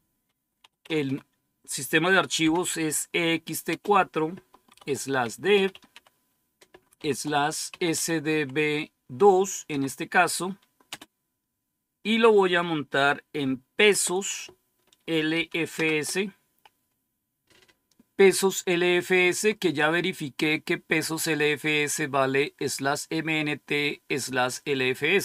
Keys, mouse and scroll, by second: 0.5-1.0 typing, 2.3 typing, 3.6 typing, 4.6-5.8 typing, 6.9-8.2 typing, 9.6 typing, 10.8 typing, 13.7 typing, 14.9-15.7 typing.